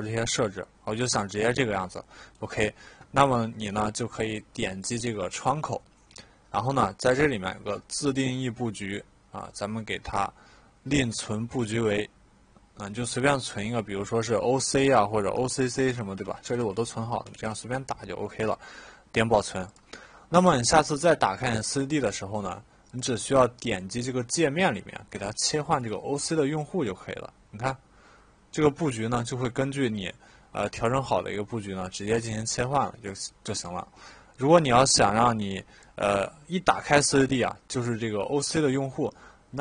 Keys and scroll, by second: 15.3 Caps_Lock, 15.5-17.9 typing.